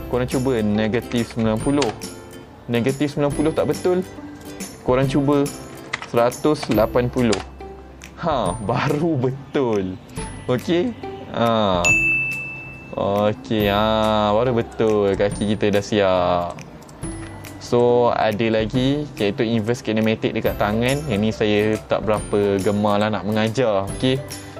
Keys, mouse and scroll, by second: 0.0 click, 4.5 click, 10.2 click, 10.6 middle click, 12.2 g, 14.7 right click, 15.2 click, 15.7 g, 16.5 right click, 16.9 click, 17.3 g, 17.8 right click, 18.3-18.7 middle drag, 19.0-19.4 scroll down 1, 19.7 click, 24.3 middle click, 24.3 scroll down 3.